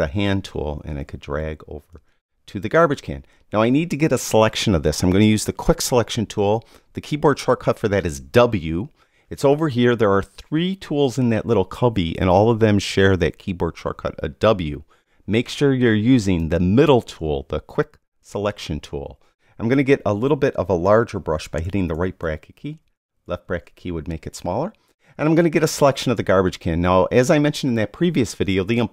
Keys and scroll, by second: 21.6 ].